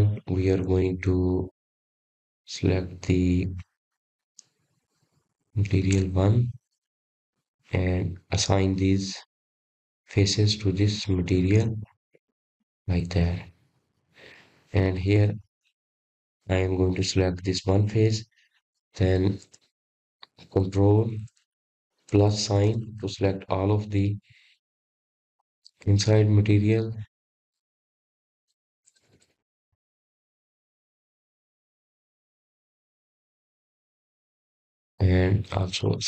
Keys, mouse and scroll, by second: 0.2-3.2 middle drag, 6.3-9.4 drag, 16.5 click, 17.6-18.7 middle drag, 18.7 click, 19.1-20.5 middle drag, 20.5-20.9 scroll up 2, 21.7 click, 24.2 KP_Add, 25.6 ctrl+KP_Add, 25.8 ctrl+KP_Add, 26.0 ctrl+KP_Add, 26.2 ctrl+KP_Add, 26.7 ctrl+KP_Add, 26.9-27.8 ctrl+KP_Add, 28.0 ctrl+KP_Add, 28.2 ctrl+KP_Add, 28.4 ctrl+KP_Add, 28.6-29.6 ctrl+KP_Add, 30.2-30.7 scroll down 5, 30.9-33.7 middle drag, 33.7 ctrl+KP_Add, 33.9 ctrl+KP_Add, 34.1 ctrl+KP_Add, 35.8 ctrl+KP_Subtract.